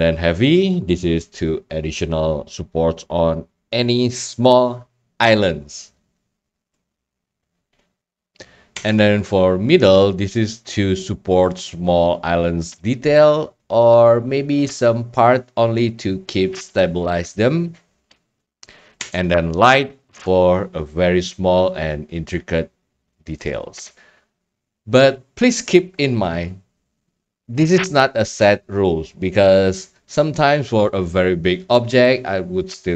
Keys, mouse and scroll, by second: 8.0 middle click, 8.1 middle click, 8.7 Tab, 12.9-13.9 drag, 14.0-15.3 scroll down 4, 15.3 scroll down 1, 15.5-16.1 scroll up 4, 16.1-17.2 middle drag, 16.1 scroll, 19.0 Tab, 23.5-24.5 drag.